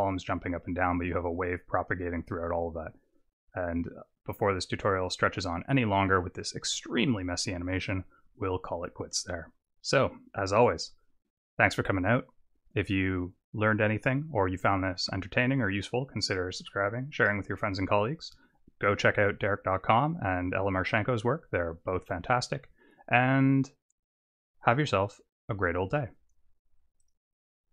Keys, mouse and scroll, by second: 10.8 click.